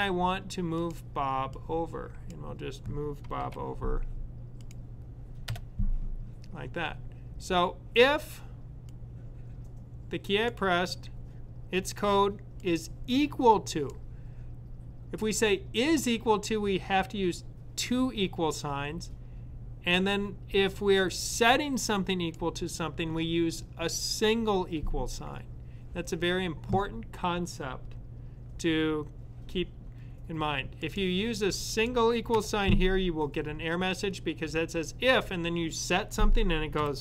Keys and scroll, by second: 3.3 super+], 36.6 =.